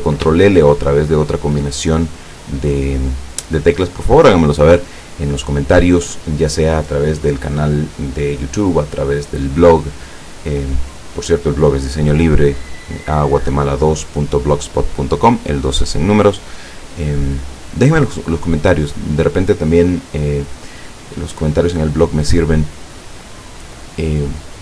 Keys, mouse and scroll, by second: 0.5-1.7 ctrl+shift+middle drag.